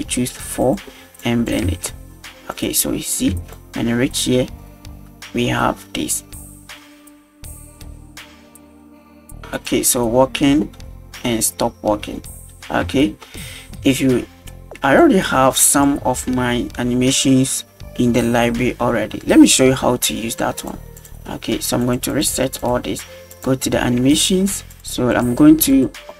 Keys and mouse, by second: 0.7 click, 1.3 click, 1.7 space, 2.6 click, 3.3 space, 3.6 click, 7.8 space, 12.9 space, 13.9 drag, 15.7 right click, 20.6 click, 21.0 click, 21.8 click, 22.1 click, 22.6 click, 23.3 click, 24.7 click, 25.7-26.1 drag.